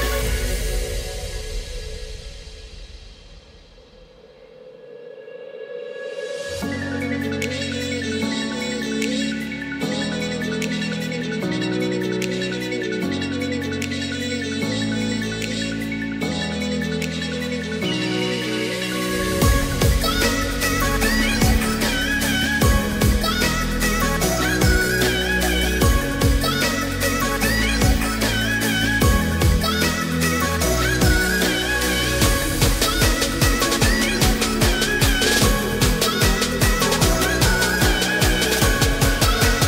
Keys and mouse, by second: 1.0-2.5 right drag, 2.5 s, 3.0 y, 4.9-5.3 drag, 5.3 middle click, 7.0 Tab, 8.2 Tab, 8.9 ctrl+a, 9.8 Tab, 11.0 3, 11.3 click, 11.7 middle click, 14.2 i, 16.4 i, 19.6 e, 26.7 click, 27.9-32.0 middle drag, 33.3 Tab, 34.0 Tab, 34.6 shift+middle click, 36.0 middle click, 36.9 shift+middle click, 39.3 e.